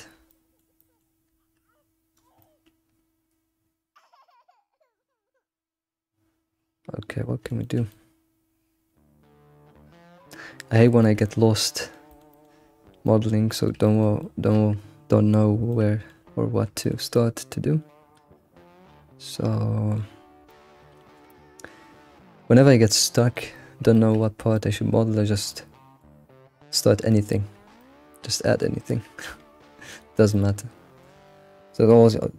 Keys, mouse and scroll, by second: 0.1 scroll down 1, 0.3-2.1 shift+middle drag, 2.1 scroll down 5, 2.4-5.4 middle drag, 7.6-10.6 shift+middle drag, 10.8 middle click, 11.0-12.1 shift+middle drag, 12.3 alt+middle click, 13.0-16.9 middle drag, 17.1-20.1 middle drag, 20.3 scroll down 1, 20.5-23.5 shift+middle drag, 23.6-23.9 scroll up 3, 23.9-24.3 shift+middle drag, 24.3-25.5 scroll up 5, 24.5-24.9 shift+middle drag, 25.5-28.6 shift+middle drag, 28.8 scroll up 2, 29.2 Tab, 30.0 click, 30.4-32.3 middle drag.